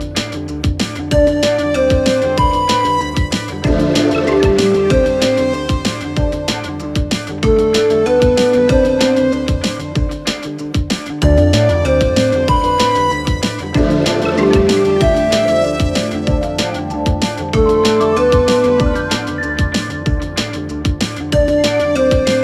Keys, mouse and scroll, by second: 4.1-6.9 click, 8.5 click, 12.2-13.7 click, 15.6-16.7 click, 19.2 click, 20.3-21.7 typing.